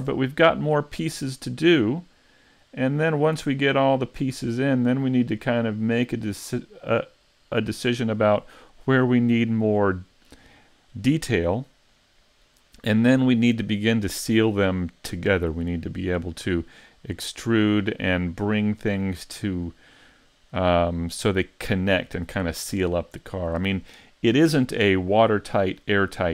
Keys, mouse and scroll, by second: 1.3-1.8 scroll down 3, 1.8 middle click, 3.0-3.5 scroll down 1, 3.5 middle click, 4.5 scroll down 2, 5.1 scroll down 3, 5.5 middle click, 6.4 scroll up 2.